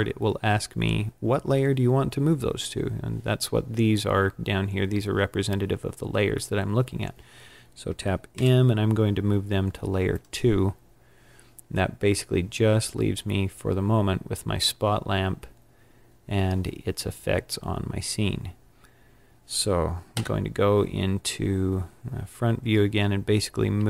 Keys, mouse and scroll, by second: 8.2 m, 10.0 m, 18.1-19.0 scroll up 4, 19.0-20.1 scroll up 2, 20.1 KP_7, 21.0-21.5 scroll down 5, 22.2 scroll up 3, 23.7 g.